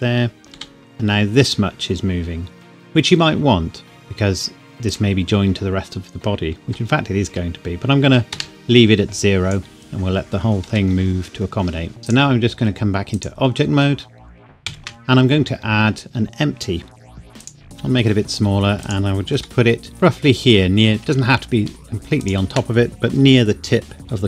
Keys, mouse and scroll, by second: 0.5 g, 4.8 click, 6.6 g, 8.3 Escape, 9.2 click, 10.6 g, 12.0 Escape, 12.0 click, 14.6 shift+a, 17.4 click, 17.7 KP_5, 18.6 s, 18.8 click, 19.4 g, 22.2 shift+click.